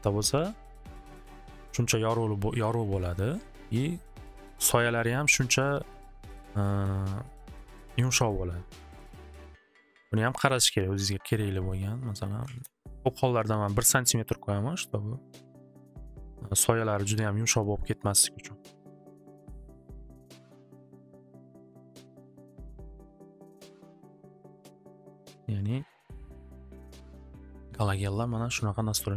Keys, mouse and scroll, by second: 1.3 Return, 2.8 Return, 6.1 middle click, 6.8 middle click, 7.8 middle click, 11.6 click, 12.2 click, 12.3 click, 12.4 1, 12.6 Return, 14.3 click, 17.5 middle click, 19.6-21.0 middle drag, 21.5 click, 24.7-26.5 drag, 27.8 click, 28.1 click, 28.6 click, 28.8 click.